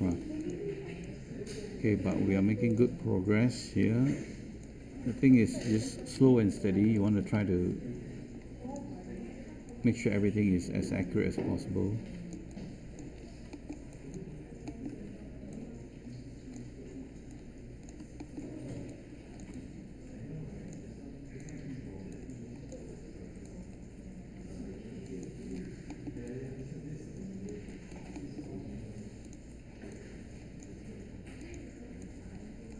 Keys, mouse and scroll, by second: 6.1 ctrl+z.